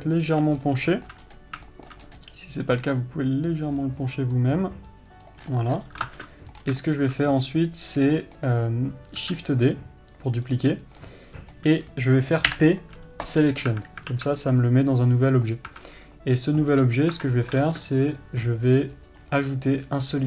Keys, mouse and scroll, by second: 1.1 scroll up 1, 2.6 scroll up 1, 5.9 scroll down 1, 7.3-11.1 middle drag, 11.6-15.1 middle drag, 15.1 click, 15.6-19.6 middle drag, 19.6-20.2 drag.